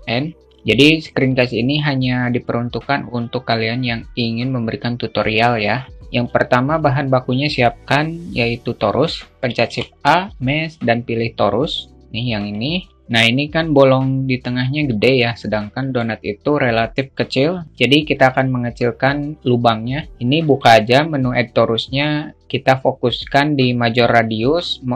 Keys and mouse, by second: 9.1 shift+a, 14.3-15.4 alt+middle drag.